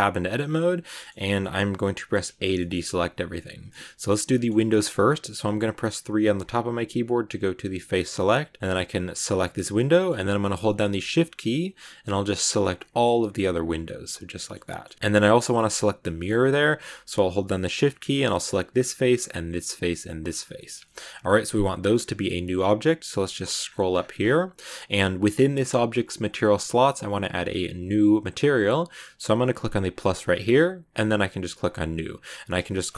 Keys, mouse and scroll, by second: 0.0-2.2 middle drag, 2.2 a, 2.5-5.9 shift+middle drag, 5.9 3, 9.2 right click, 9.5 scroll down 1, 9.7-11.3 middle drag, 11.3 shift+right click, 12.1 shift+right click, 12.4 scroll down 1, 12.5 middle click, 13.4 shift+right click, 13.7-14.9 middle drag, 14.9 scroll down 4, 15.3 middle click, 15.5-15.9 scroll up 3, 15.9 middle click, 16.1 scroll up 1, 18.6 shift+right click, 19.3 shift+right click, 20.0 shift+right click, 20.2 scroll down 6, 20.4-23.3 shift+middle drag, 23.3-27.1 scroll up 10, 29.8-32.1 drag, 32.1-32.9 drag.